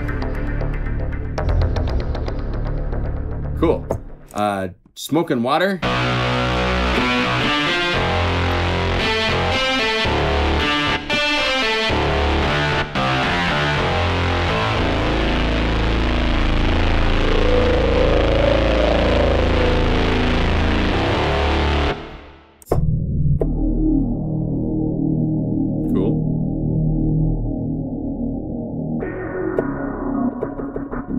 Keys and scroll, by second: 1.3 F2, 13.2 F3, 13.7 F2.